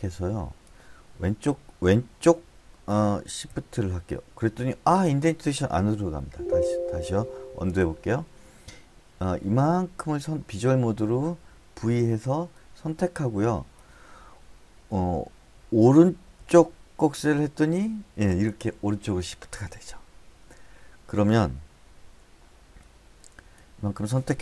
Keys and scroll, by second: 3.9 shift+,, 6.7 shift+Tab, 8.1 u, 12.3 v, 16.9 >.